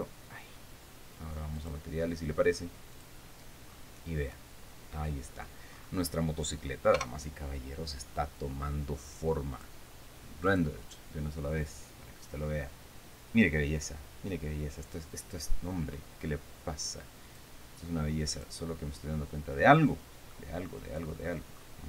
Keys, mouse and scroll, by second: 0.4 click, 2.1 click, 3.5 click, 4.2-4.5 scroll down 1, 4.9-6.1 middle drag, 6.3-6.7 scroll up 1, 7.5 KP_0, 10.1 click, 11.0 click, 17.8 click, 18.9 click, 19.6 scroll up 1, 20.2 scroll down 1, 20.9-21.8 middle drag.